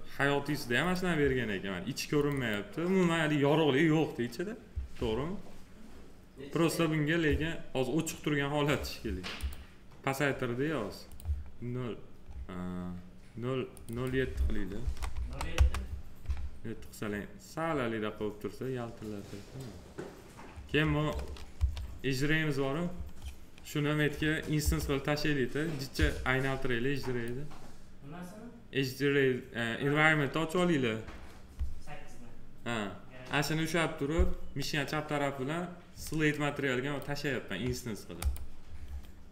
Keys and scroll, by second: 14.7 0, 15.5 Return, 21.5 8, 24.5 8, 25.9 8.